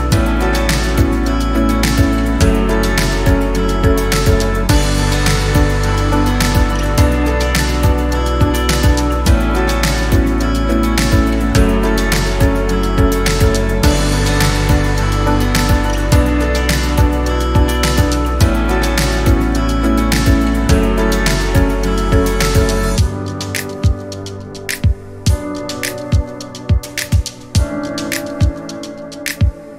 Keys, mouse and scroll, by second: 1.2-3.4 typing, 3.0 middle click, 3.6 click, 3.8 click, 3.9 middle click, 4.1 click, 4.2 click, 4.4 click, 4.5 middle click, 4.6-5.1 scroll down 2, 4.9 click, 5.0 click, 5.1 middle click, 5.5-6.2 typing, 6.3-8.1 middle drag, 8.1 click, 8.8 Tab, 8.9 click, 9.1 middle click, 9.4 click, 9.6 shift+click, 9.8 click, 10.4 middle click, 11.2 Tab, 11.5 scroll up 1, 11.6 middle click, 12.5 click, 12.8 middle click, 13.8-14.9 drag, 14.9 o, 16.6 l, 17.0 middle click, 17.1 l, 17.3 middle click, 17.8 click, 18.1-19.3 shift+middle drag, 26.9 middle click.